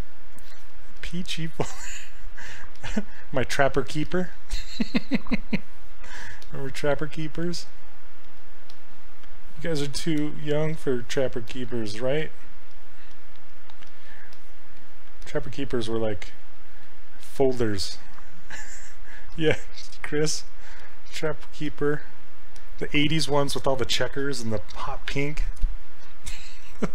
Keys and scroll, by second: 2.8 s, 7.4 s.